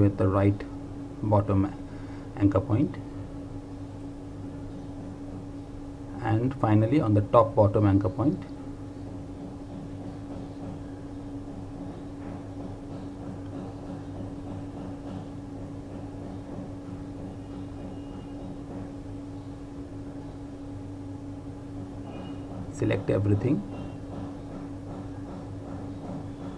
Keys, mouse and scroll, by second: 0.5 click, 7.1 click, 8.8 ctrl+click, 11.9 click, 21.6 click, 23.3 ctrl+click, 25.2 click.